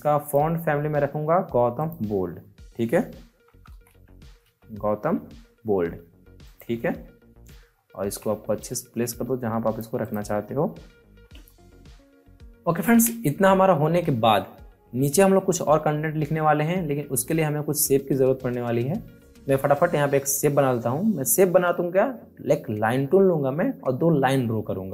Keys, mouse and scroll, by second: 0.1 click, 3.0-4.9 typing, 6.4 click, 7.7 alt+scroll up 1, 8.5-9.9 drag, 10.2 scroll down 2, 12.2 alt+scroll up 1, 12.4 alt+scroll down 1, 16.6 alt+Num_Lock, 16.6 alt+scroll down 1, 16.8 alt+scroll up 1, 17.1 scroll down 1.